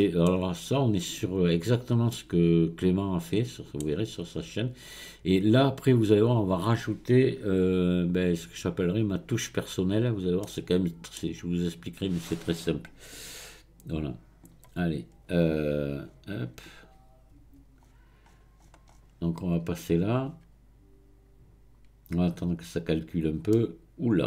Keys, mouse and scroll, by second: 0.3 scroll down 1, 2.1-5.2 middle drag, 10.4-13.4 middle drag, 14.0-16.0 drag, 16.0-16.6 scroll down 4, 16.6 scroll up 4, 17.8-18.8 scroll down 10, 20.0-22.7 drag, 23.5-24.2 middle drag.